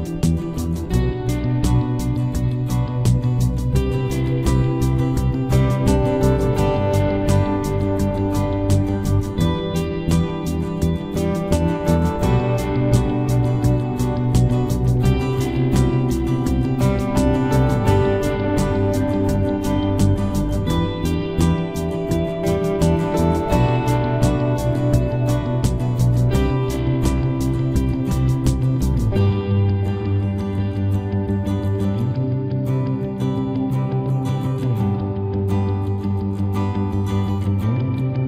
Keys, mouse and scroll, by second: 0.5-3.2 middle drag, 2.8 c, 4.1 right click, 4.7-5.9 drag, 5.0 z, 8.6-12.2 middle drag, 8.8 z, 12.8-14.6 right drag, 13.3 k, 22.2-23.8 right drag, 23.8 middle click, 24.1 i, 25.1 z, 25.5 middle click, 26.2 KP_Decimal, 29.5 click, 30.7 KP_3, 31.1 Tab, 32.0 ctrl+s, 32.4 z, 35.9 Tab, 36.9-38.2 drag, 37.8 z.